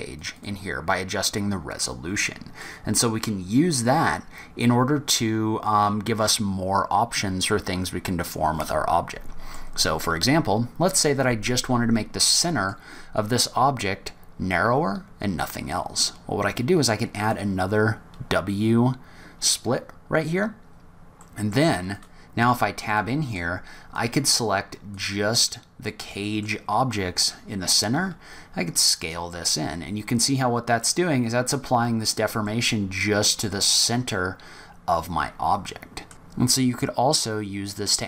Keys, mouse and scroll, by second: 0.1 click, 0.3 click, 2.6 middle click, 12.2 middle click, 17.2 click, 21.2 middle click, 21.9 click, 22.4 Tab, 22.9 middle click, 23.9 click, 25.8 middle click, 27.9 s, 32.4 middle click.